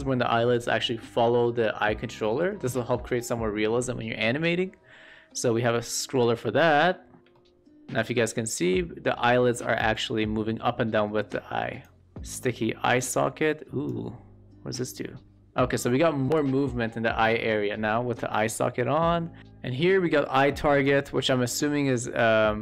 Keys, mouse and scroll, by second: 5.8-7.2 drag, 7.2-7.9 shift+middle drag, 8.5-11.8 drag, 12.9 click, 14.7-16.2 drag, 20.8-22.6 drag.